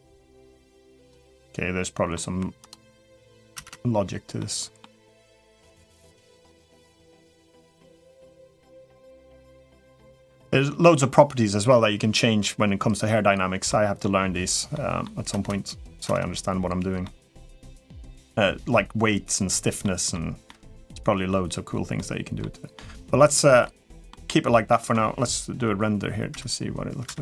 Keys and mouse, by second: 0.8 click, 1.0-1.9 middle drag, 2.4 click, 2.6-3.0 middle drag, 3.3 space, 4.2-4.6 middle drag, 5.6 middle click, 6.6 middle click, 7.6-8.0 middle drag, 8.5-9.0 middle drag, 9.1-9.6 middle drag, 9.7-10.0 middle drag, 13.5-13.8 middle drag, 14.5 middle drag, 15.8 space, 16.8-17.1 middle drag, 17.5 middle click, 19.6 middle drag, 20.2-20.6 middle drag, 21.7-22.2 middle drag, 22.5 middle drag, 23.4-23.9 middle drag, 24.0-24.5 middle drag, 26.8 space.